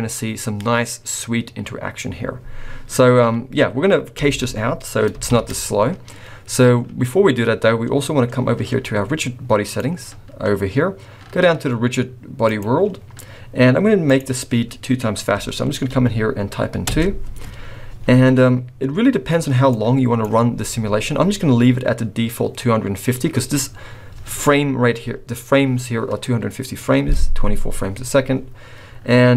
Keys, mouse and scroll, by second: 4.4 space, 5.3 shift+Left, 5.9-7.5 scroll up 3, 9.6 click, 12.4 click, 14.1 click, 19.7 click, 20.8-22.1 scroll down 2.